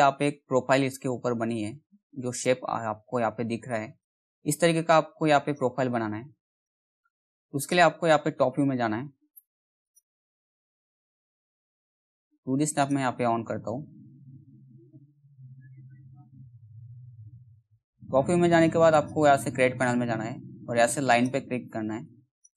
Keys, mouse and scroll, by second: 1.6-6.1 drag, 8.0 t, 8.9 z, 9.4-12.3 drag, 13.0 middle click, 14.2 g, 16.4 middle click, 16.7 z, 17.3 middle click, 18.5 click.